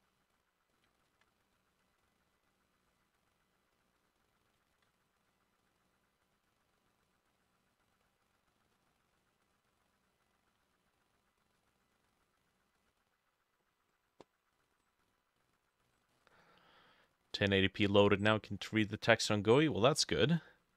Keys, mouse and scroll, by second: 0.0-7.4 drag, 0.9 ctrl+middle click, 4.6 ctrl+middle click, 4.8 ctrl+z, 8.8 ctrl+click, 9.5 double click, 10.0 double click, 12.3 double click, 12.5 double click, 12.9 double click, 16.2 middle click, 16.3-17.1 scroll up 1, 17.1 scroll down 1, 17.4 middle click, 17.7-19.2 scroll up 1, 19.8 middle click.